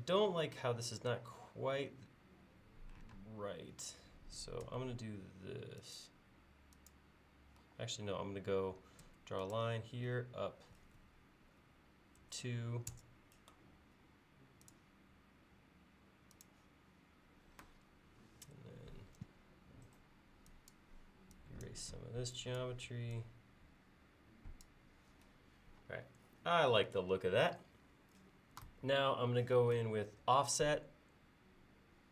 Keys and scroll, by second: 3.1 space, 4.7 l, 7.6 l, 9.0 l, 12.2 2, 12.9 Return, 19.3 e.